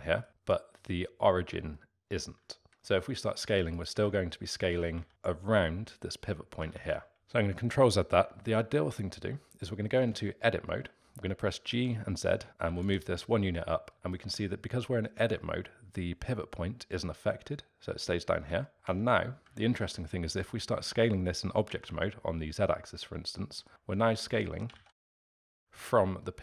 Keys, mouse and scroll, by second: 0.0-2.9 alt+middle drag, 2.9 s, 4.0 ctrl+z, 4.7 s, 6.7 ctrl+z, 7.2 ctrl+z, 9.9 Tab, 11.6 g, 13.9-17.4 middle drag, 18.6 alt+middle drag, 18.8 Tab, 19.6-21.6 alt+middle drag, 21.6 s, 24.7 ctrl+z, 25.0 s, 25.6-26.4 alt+middle drag.